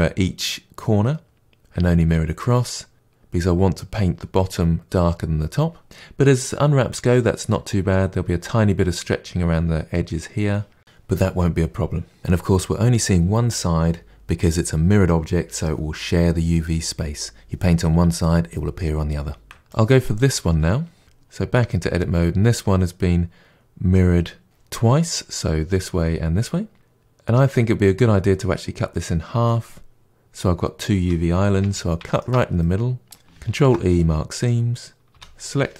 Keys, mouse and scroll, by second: 19.4 Tab, 19.7 click, 21.0 Tab, 21.6-29.0 middle drag, 31.5 2, 32.1 alt+click, 32.5-34.4 middle drag, 34.4 ctrl+e, 35.1 a.